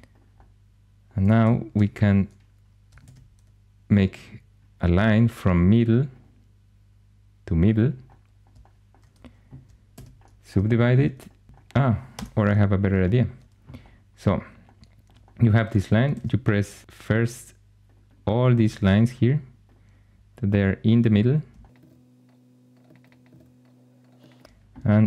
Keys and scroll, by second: 1.6 1, 2.9 shift+a, 9.8 shift+s, 11.5 g, 12.0 Escape, 16.0 shift+a, 18.6 shift+a, 21.8 shift+a, 23.3 shift+a, 24.9 shift+s.